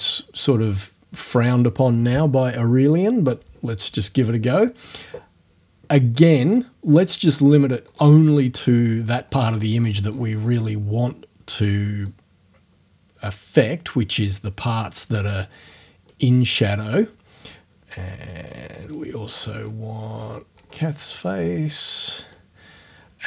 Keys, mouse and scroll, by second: 0.7 click, 1.3 click, 6.2 click, 7.9 click, 9.2-9.8 scroll up 2, 10.6 scroll up 2, 12.1-16.3 drag, 18.9 click, 19.5-19.9 scroll up 1, 20.2 middle click, 20.5-20.8 scroll up 3, 21.2-22.5 drag.